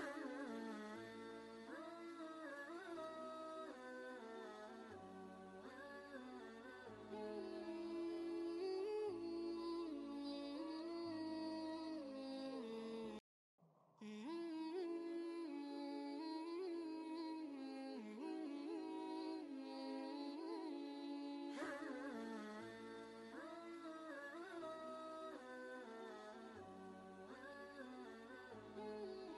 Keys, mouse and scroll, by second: 0.2-2.6 drag, 2.6 space, 2.7-5.6 drag, 5.6 ctrl+space, 5.8 ctrl+click, 6.2 space, 6.2 click, 9.1 ctrl+a, 10.2-11.2 typing, 12.5-15.9 typing, 17.9 Down, 19.1 space, 20.6-21.8 typing, 22.1 Return, 24.3 click, 24.4 click, 25.8 typing.